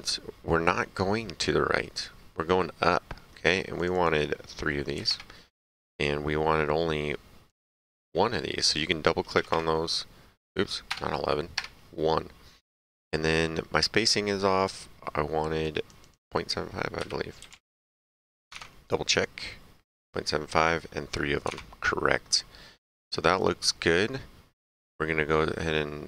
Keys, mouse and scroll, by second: 3.7 click, 4.9 KP_3, 5.0 KP_Enter, 7.4 click, 9.3 KP_1, 10.8 BackSpace, 11.5 Return, 15.6 click, 16.9 KP_Decimal, 17.5 KP_5, 17.5 KP_7, 17.7 Return, 18.5 alt+Tab, 21.4 alt+Tab, 23.3 right click.